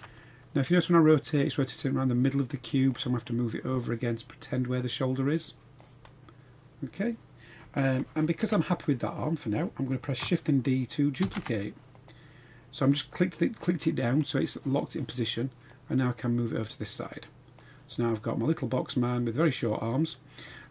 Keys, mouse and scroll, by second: 0.0 shift+scroll down 1, 0.2-0.7 scroll up 2, 1.2-2.9 drag, 3.7 click, 4.8-5.8 drag, 6.0-6.9 middle drag, 7.9 KP_3, 8.4 KP_1, 9.0 scroll down 3, 11.2 shift+d, 15.7-17.6 drag, 17.9-20.4 middle drag.